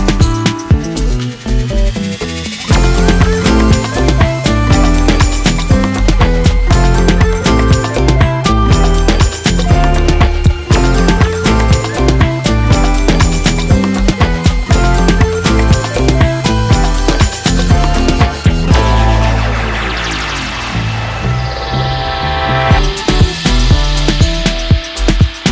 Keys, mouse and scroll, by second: 0.3 middle click, 0.8 click, 1.4 middle click, 1.7-3.0 drag, 3.4-3.8 middle drag, 3.8-4.4 drag, 4.6-5.7 drag, 6.2-7.4 drag, 7.8 click, 8.1 click, 9.4 drag, 10.8 click, 12.2 drag, 13.3-14.0 drag, 14.3 click, 14.8-15.8 drag, 16.4-17.4 drag, 18.6 shift+middle click, 19.3 click, 19.7-20.8 drag, 21.3 click, 21.6-22.7 drag, 24.1 click, 24.6-25.5 drag.